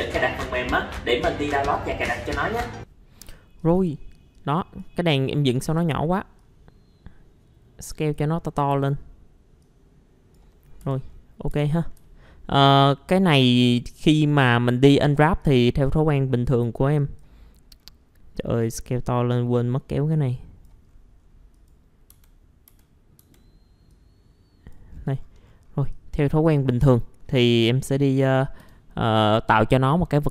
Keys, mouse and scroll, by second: 4.3 click, 5.4 middle click, 6.4-8.2 drag, 8.7 w, 9.6 click, 10.8 F4, 11.1-11.5 scroll up 1, 11.5 F4, 12.2 alt+middle click, 13.6 click, 14.7 middle click, 14.7-15.4 scroll down 1, 15.4 click, 16.1 middle click, 17.0 click, 17.5-17.8 scroll up 1, 17.8 scroll down 1, 17.9-18.8 scroll up 1, 18.9-20.8 drag, 20.8-21.5 scroll up 1, 21.5 click, 22.1-23.2 typing, 23.9 click, 24.9-25.5 scroll down 1, 25.9 click, 26.7 middle click.